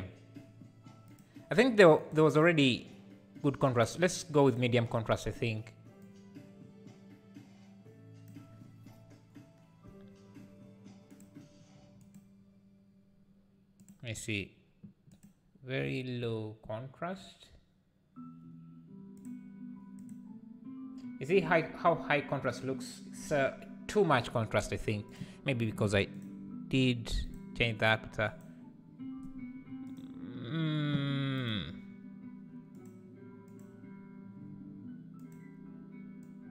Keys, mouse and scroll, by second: 28.4-36.5 drag.